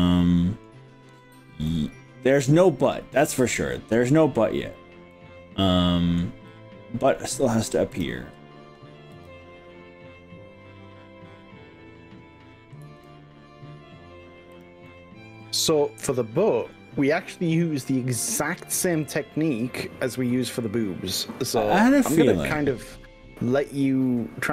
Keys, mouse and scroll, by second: 1.2 scroll up 1, 1.7-2.9 middle drag, 3.2-4.2 middle drag, 5.1-6.2 middle drag, 6.5-7.2 middle drag, 8.0 click, 9.2 g, 12.8 z, 14.6 click, 14.9-18.6 middle drag, 19.2 click, 19.8 middle click, 20.5-21.2 middle drag, 21.4-21.9 scroll down 3, 22.2-23.0 middle drag, 23.2-23.8 scroll up 4.